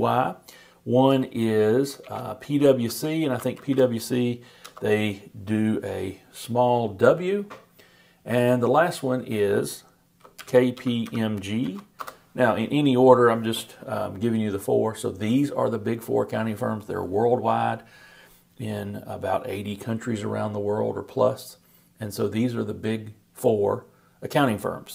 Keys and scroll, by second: 2.0-4.0 typing, 10.1-11.6 typing, 12.0 shift+Return.